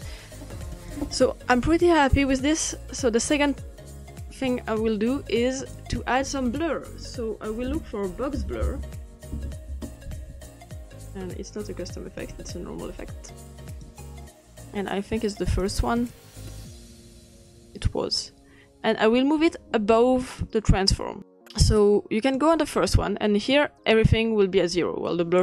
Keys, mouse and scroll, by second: 0.7 click, 4.3-7.3 drag, 8.4-9.7 typing, 12.2-17.8 drag, 20.2-22.4 drag, 23.5-24.0 drag.